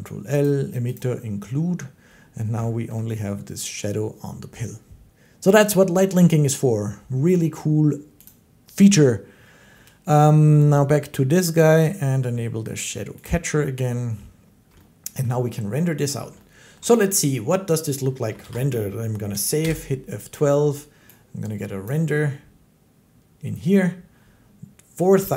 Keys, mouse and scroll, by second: 0.3 click, 0.8 click, 2.8 shift+middle click, 7.8 middle click, 8.1-14.1 drag, 14.3 click, 14.5-16.0 shift+drag, 15.2 shift+middle click, 15.9 shift+middle click, 16.6 shift+middle click, 18.3 ctrl+s, 19.4 F12, 20.9 shift+scroll, 21.8 click.